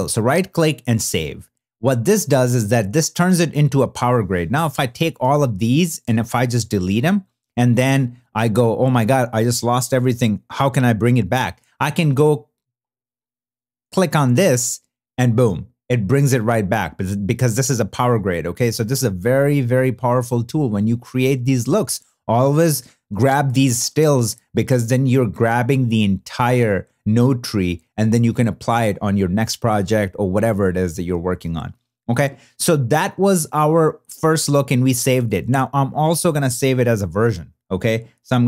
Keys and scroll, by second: 6.0 BackSpace, 6.8 alt+BackSpace.